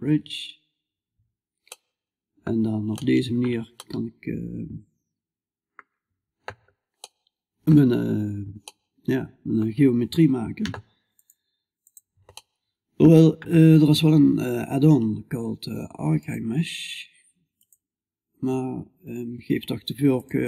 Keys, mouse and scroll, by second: 0.2-2.8 middle drag, 3.3 middle click, 3.5 middle click, 4.3-6.4 middle drag, 6.4-8.4 middle drag, 11.8 middle click, 12.2-20.4 middle drag.